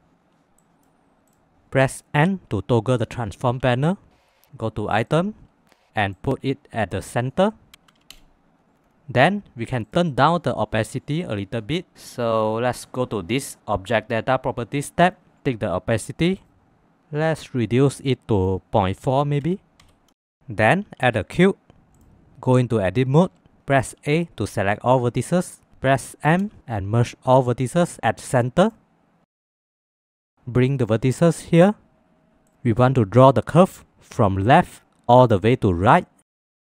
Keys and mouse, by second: 23.3 Tab, 30.2 shift+middle click.